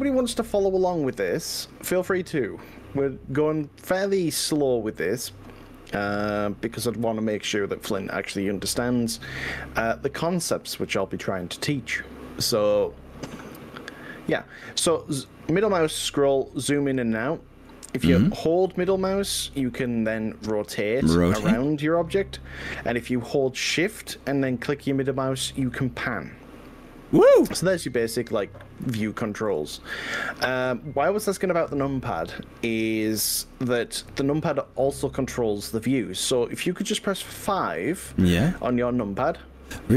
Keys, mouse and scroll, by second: 1.5-2.8 middle drag, 16.8 middle click, 18.2 scroll up 2, 18.8-19.2 scroll down 3, 20.0-24.2 middle drag, 25.5 shift+middle click, 26.0-29.6 shift+middle drag.